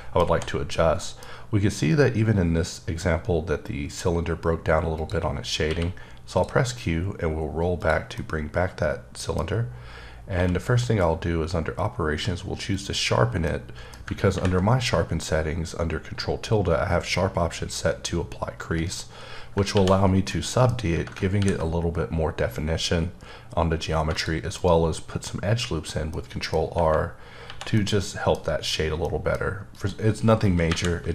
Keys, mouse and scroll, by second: 0.3 h, 1.0 middle click, 1.3-2.4 scroll up 1, 4.9 click, 5.6 q, 6.3 click, 6.8-7.8 scroll down 2, 7.8 click, 8.1-10.1 middle drag, 10.3 q, 12.7 click, 13.4 middle click, 19.7 1, 20.3 middle click, 21.6 r, 21.7-23.3 scroll up 5, 23.3-24.1 scroll up 1, 24.1 click, 24.6 right click, 26.2 middle click, 27.4 1, 27.7 middle click, 28.7 scroll down 2, 29.0 middle click, 29.7 click, 30.7 KP_1.